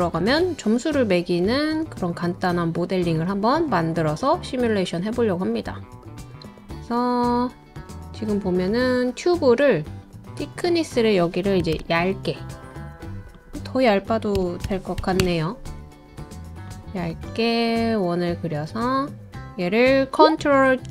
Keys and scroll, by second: 11.6 1, 11.8 Return, 14.1-15.5 typing.